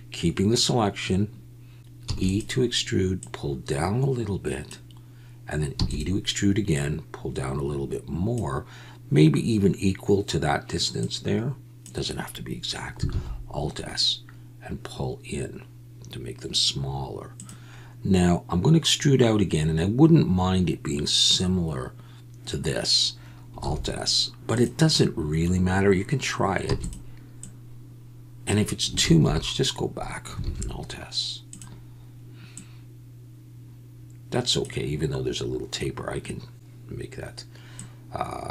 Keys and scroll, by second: 2.0 e, 5.8 e, 13.1 alt+s, 23.7 alt+s, 26.8 e, 29.0 ctrl+z, 30.4 alt+s.